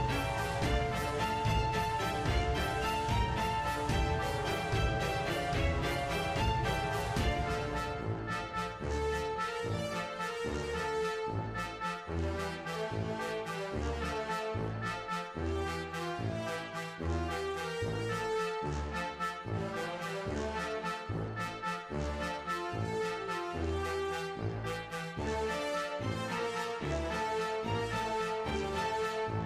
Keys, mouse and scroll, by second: 0.0 g, 0.3 click, 0.4-0.9 middle drag, 0.9 r, 1.3 click, 1.3-1.9 middle drag, 1.9 g, 2.2 click, 2.3 g, 2.7 click, 2.8 g, 3.3-3.7 middle drag, 4.0 click, 4.6 click, 4.7-7.9 typing, 5.1 middle drag, 5.6 click, 5.7 middle drag, 6.0 middle drag, 6.5 click, 6.8 middle click, 7.0 click, 7.6 click, 8.2 middle click, 9.2 click, 9.5 middle click, 10.1 g, 10.6 click, 10.7 g, 11.0 click, 11.2 middle click, 11.5 click, 11.7 click, 11.9 scroll down 1, 12.1 scroll up 1, 12.2 middle click, 12.3 click, 12.4 middle click, 13.6 scroll down 1, 13.7-14.1 middle drag, 14.1 click, 15.1 a, 15.3 i, 16.1 click, 16.7 space, 17.3-17.7 scroll down 8, 17.3 space, 17.7 shift+middle click, 17.8 scroll up 1, 17.8 shift+middle click, 18.0 click, 18.4 space, 18.9 space, 19.1 click, 19.4 click, 19.8 shift+d, 20.4 right click, 21.0 a, 21.6 click, 21.9 a, 22.1 drag, 22.4 shift+d, 23.3-24.5 drag, 24.5 space, 24.7 click, 25.2 click, 25.4 middle drag, 25.8 g, 26.1 middle drag, 26.5 click, 26.8 middle drag, 27.9 click, 28.7 shift+middle drag, 29.1 g.